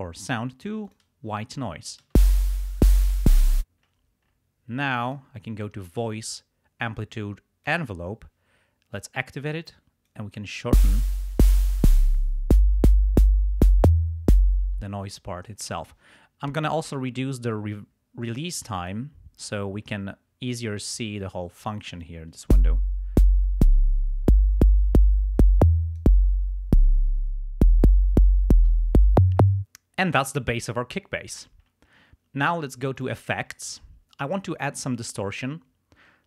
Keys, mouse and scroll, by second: 0.9 click, 2.1 space, 3.5 space, 5.1 click, 7.6 click, 8.9 click, 9.5 click, 10.6 space, 10.7 space, 11.2-12.3 drag, 14.7 space, 16.5-19.1 drag, 22.0-26.2 drag, 22.4 space, 30.1 space, 33.0 click.